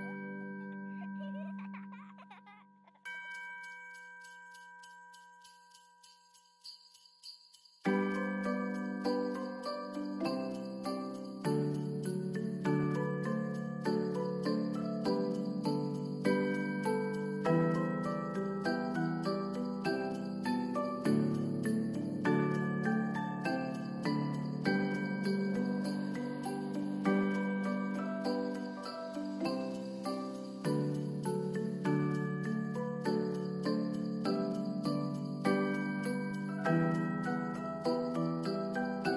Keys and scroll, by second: 2.2 ctrl+s, 4.5 ctrl+d, 7.3 ctrl+s.